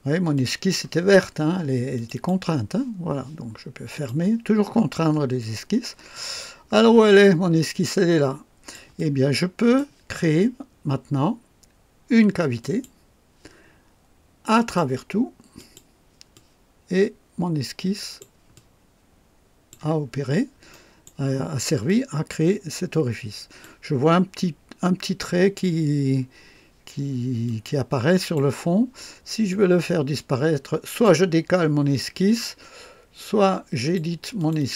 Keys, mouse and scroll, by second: 0.3 click, 1.9 click, 3.9 click, 5.0 scroll up 1, 5.5 scroll down 1, 6.1-8.9 drag, 9.1 click, 12.5 click, 14.5 click, 15.5 click, 16.3-18.3 drag, 18.5-19.8 drag, 20.0 scroll up 1, 20.6 right click, 21.8-23.8 drag, 27.4-28.5 drag, 29.4 click, 33.7 click, 34.3 click.